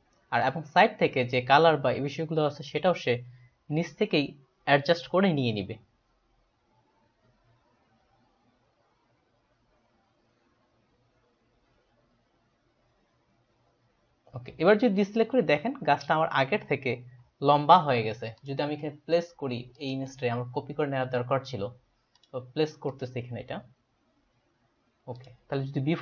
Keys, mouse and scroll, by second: 15.3 ctrl+d, 18.4 click, 19.8 click, 22.2 click, 22.9 click, 23.0 click, 25.2 click.